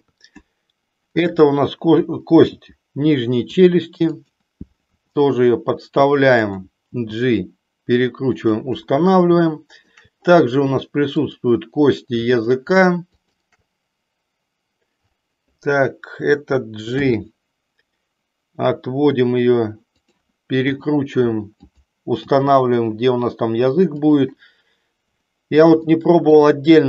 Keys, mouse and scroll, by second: 0.0 KP_3, 2.5 g, 4.2 click, 5.0 r, 7.0 g, 9.6 shift+middle click, 11.2 click, 16.8 g, 20.0 click, 20.7 r, 21.7 click, 22.2 g, 24.1 click, 25.8 shift+middle click.